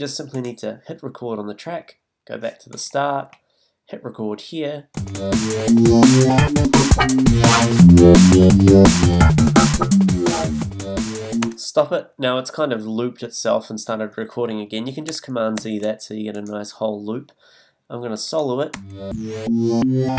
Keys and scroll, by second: 11.4 space, 15.6 super+z, 18.7 space.